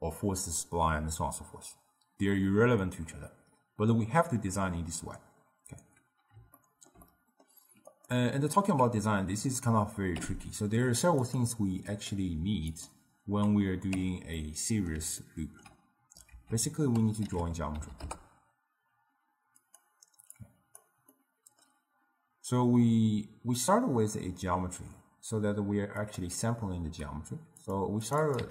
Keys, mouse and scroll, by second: 6.6-8.0 ctrl+middle drag, 8.0 click, 10.2 n, 11.3 click, 12.0-14.0 drag, 14.0 n, 14.5-16.4 middle drag, 16.4 ctrl+a, 20.4 click, 21.2-24.2 middle drag, 26.0 click, 26.8 n, 27.7 click, 28.1 click, 28.3-28.5 drag.